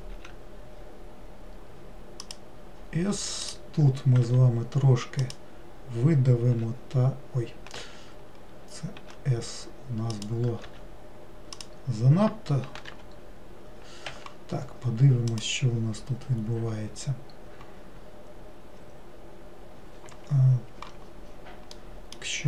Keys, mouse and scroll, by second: 3.5 click, 15.4-18.1 drag, 18.1 scroll down 2, 20.2 Escape, 20.8 Escape, 21.9-22.4 middle drag.